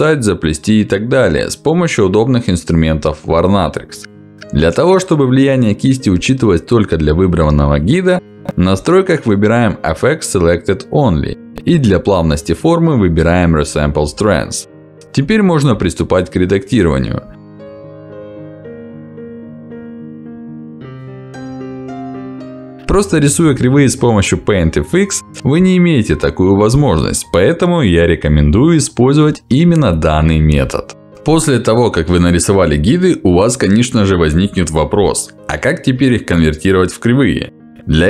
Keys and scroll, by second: 4.9 ctrl+z, 13.9 Escape.